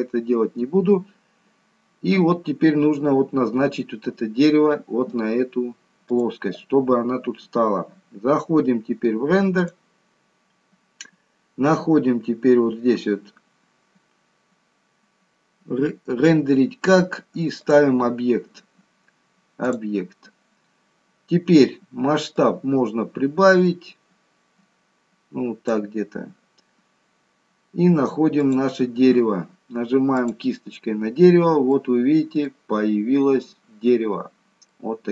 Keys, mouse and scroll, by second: 6.1 click, 7.5 scroll down 3, 9.0-9.5 scroll down 2, 9.5 click, 11.4-12.7 scroll down 1, 17.5 click, 22.3 click, 27.7 scroll down 2, 28.4 click, 31.3 scroll up 4, 31.7 middle click, 33.1-33.5 scroll up 2, 33.7-34.3 scroll down 2, 34.7 middle click.